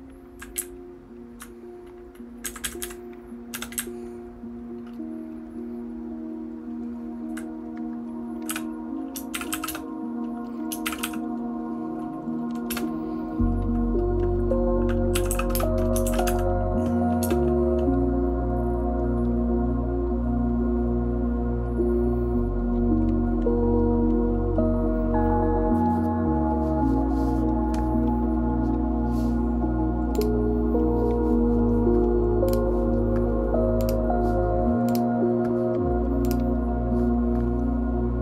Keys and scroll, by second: 0.6 Up, 1.1 Up, 2.4 Down, 2.8 Down, 3.5 v, 4.2 Down, 4.2-7.3 Up, 4.2 v, 8.5-10.2 typing.